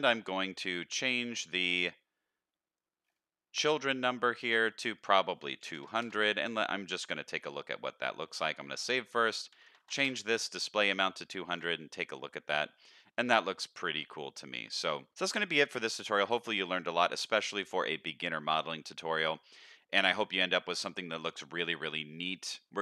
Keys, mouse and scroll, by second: 1.7 click, 3.0-3.6 scroll down 1, 3.6 scroll down 1, 3.7 click, 4.9-6.1 drag, 5.9 KP_0, 7.0 z, 8.2 ctrl+s, 8.8-10.1 drag, 9.8 KP_0, 11.1 z, 12.9-13.2 middle drag, 14.1 middle click, 16.3-16.9 middle drag, 17.2-22.8 middle drag.